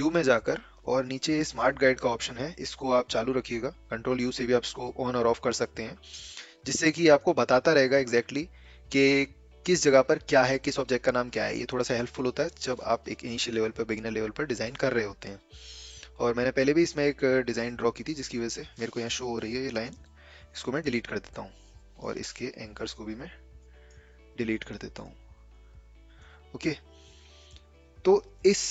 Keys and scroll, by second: 19.9 a, 19.9 Delete, 25.4 Delete.